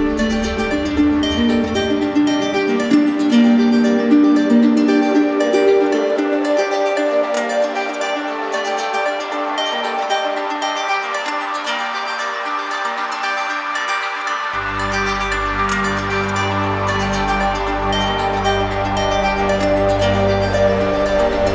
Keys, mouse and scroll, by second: 0.0 click, 1.2 click, 2.8 click, 4.4 right click, 5.7 click, 6.2 click, 6.9 click, 8.7 click, 9.6 click, 10.5 click, 11.2 click, 12.5 right click, 13.2 alt+click, 14.9-16.0 typing, 16.9 click, 18.1 click, 19.0 click, 20.0 click, 21.0 right click.